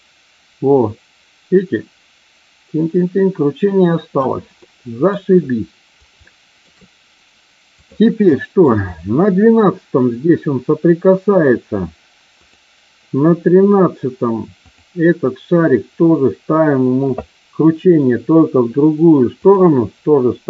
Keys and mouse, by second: 4.6-5.2 middle drag, 6.1-6.6 shift+middle drag, 8.2-8.6 middle drag, 14.6 click, 19.3-20.4 drag.